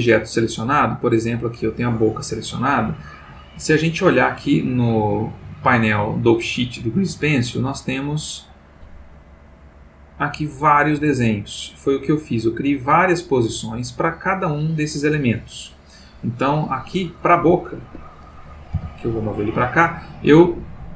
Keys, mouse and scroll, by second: 0.3 click, 1.0 click, 7.7-14.8 drag, 16.8 click, 17.3 g, 17.8 Escape, 18.1 click, 18.8 g, 19.4 click, 20.5-20.9 drag.